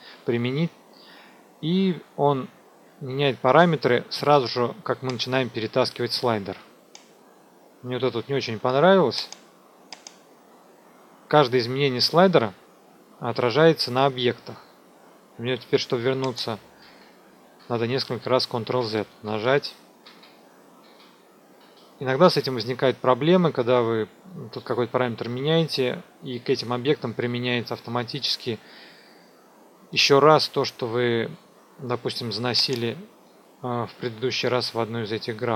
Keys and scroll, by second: 16.8 ctrl+z.